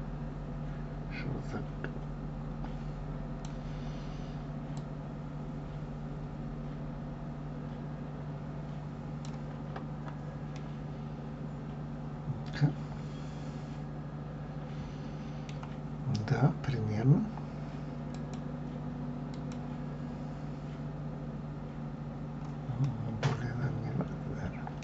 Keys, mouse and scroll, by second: 4.7-7.8 drag, 10.6-13.6 middle drag, 18.2-22.3 drag, 22.9-24.8 middle drag.